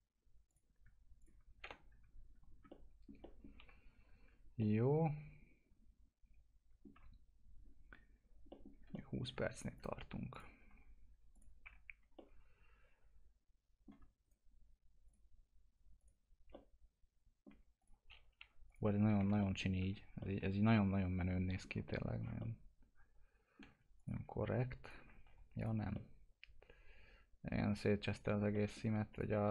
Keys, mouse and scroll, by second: 0.4 click, 1.6 ctrl+BackSpace, 2.8 alt+middle click, 3.6 F4, 4.6-8.5 alt+middle drag, 8.7 scroll down 1, 8.9 alt+middle click, 9.7 click, 10.6 click, 10.7 F4, 11.3 click, 11.6 F4, 12.1 alt+middle click, 14.2 right click, 15.0 click, 16.8 alt+middle click, 17.7 click, 18.4 Delete, 18.7 click, 19.2 F4, 19.4 middle click, 19.8 F4, 20.2-21.8 middle drag, 22.1 scroll down 1, 22.3-23.9 alt+middle drag, 23.9 ctrl+click, 24.8 ctrl+click, 25.1 alt+q, 25.5 click, 25.9-28.5 alt+middle drag, 29.1 click, 29.3 F4.